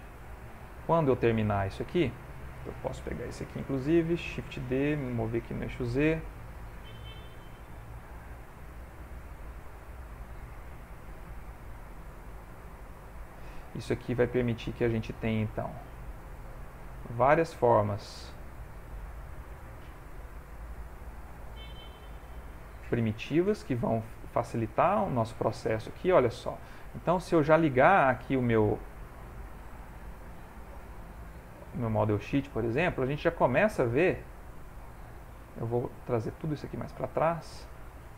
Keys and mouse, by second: 0.5 middle click, 1.6 click, 2.3 middle click, 4.6 shift+d, 6.5 g, 8.6 middle click, 8.6 click, 10.2 click, 10.9 shift+middle click, 11.4 s, 12.5 r, 13.2 g, 14.5 ctrl+middle click, 14.6 middle click, 15.6 r, 16.8 g, 17.8 r, 20.1 g, 20.9 middle click, 21.9 middle click, 23.6 click, 24.3 shift+middle click, 24.8 shift+middle click, 24.9 ctrl+middle click, 25.3 shift+middle click, 26.5 shift+middle click, 26.7 ctrl+middle click, 27.0 ctrl+middle click, 28.2 middle click, 29.0 click, 30.3 click, 31.3 click, 31.7 g, 35.0 middle click, 35.9 ctrl+middle click, 36.5 middle click, 37.9 click.